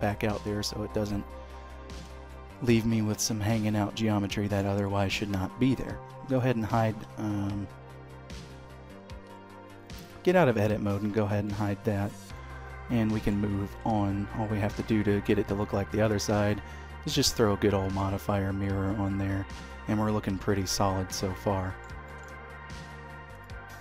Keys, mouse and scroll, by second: 0.2 middle click, 2.1 middle click, 4.7 shift+middle click, 5.6 Tab, 6.1 h, 7.3 Escape, 9.1 Tab, 9.8 middle click, 10.7 h, 11.3 shift+middle click, 11.8 click, 12.2 middle click, 13.5 alt+x, 15.4 click, 16.2 middle click, 18.1-19.1 scroll up 2, 18.4 middle click, 21.9 shift+middle click, 23.1 click.